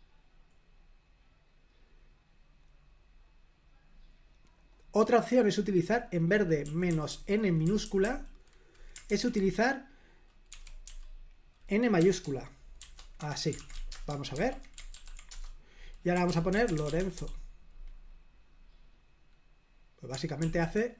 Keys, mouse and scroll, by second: 0.0-1.1 scroll down 1, 1.2-1.7 scroll down 1, 3.1-3.7 scroll down 1, 3.8-4.3 scroll up 1, 4.6-5.8 drag, 6.6-7.2 typing, 10.5-10.8 typing, 11.9-14.1 typing, 13.2 Escape, 14.3 super+h, 14.9 ctrl+p, 15.3 Return, 16.2-17.6 typing, 20.4 super+l.